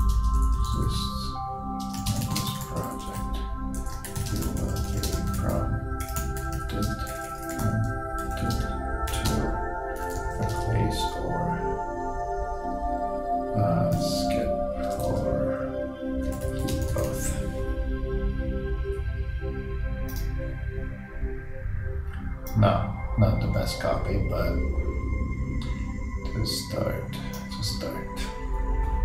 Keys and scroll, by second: 3.9-4.7 typing.